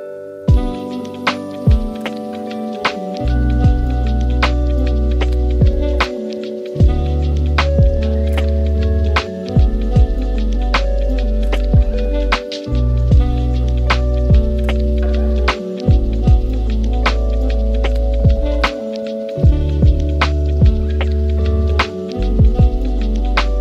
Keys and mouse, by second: 0.6-1.1 middle drag, 2.0 shift+a, 3.6 click, 4.8 click, 8.8 shift+a, 10.8 middle drag, 11.2 s, 12.7 g, 15.3 KP_0, 16.9 g, 19.0 click, 19.6 drag, 20.1-22.4 drag.